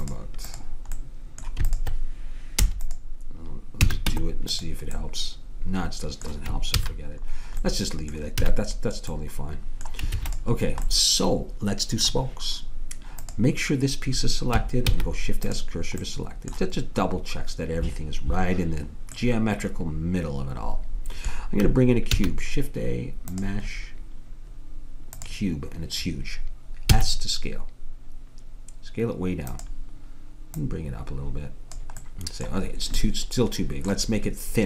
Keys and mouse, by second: 2.7 i, 3.9 a, 4.1 Tab, 6.8 ctrl+z, 8.4 a, 10.2 ctrl+s, 13.3-14.9 drag, 14.9 shift+s, 19.2-20.9 middle drag, 22.2 shift+a, 27.0 s, 30.7-32.4 drag.